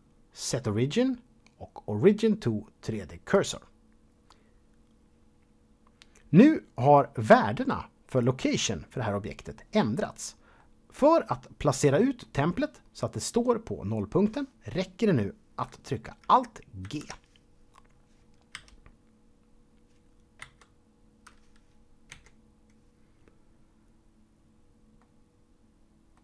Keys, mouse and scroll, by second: 4.9 click, 10.6-12.4 middle drag, 16.8 alt+g, 18.5 KP_1, 20.4 KP_7, 22.2 KP_Decimal, 25.0 middle click.